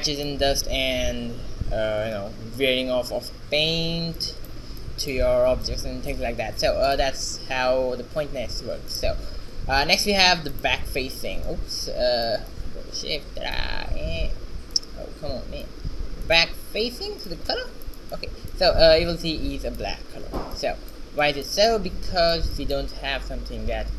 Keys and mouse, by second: 4.3-7.0 middle drag, 7.0 click, 7.3 ctrl+x, 9.3 ctrl+x, 11.6-12.7 drag, 12.7-14.5 right drag, 14.8-18.0 right drag, 20.4 shift+z, 23.3 g.